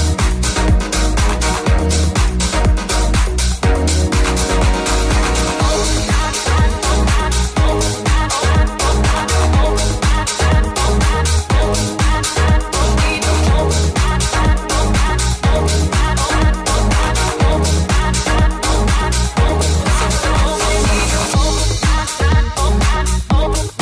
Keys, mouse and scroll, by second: 0.0 click, 0.0 g, 0.0 f, 0.3-2.8 ctrl+middle drag, 2.8-5.9 drag, 6.1-23.5 shift+drag, 10.1 g, 11.9 shift+g, 14.6-19.2 shift+middle drag.